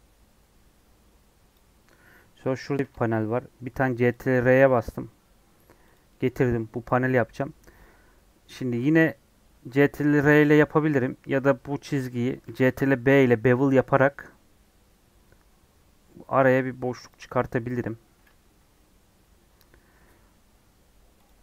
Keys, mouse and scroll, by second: 1.4 click, 2.8 ctrl+r, 10.1 ctrl+r, 18.5 scroll down 1, 19.1 scroll up 2, 21.2 click.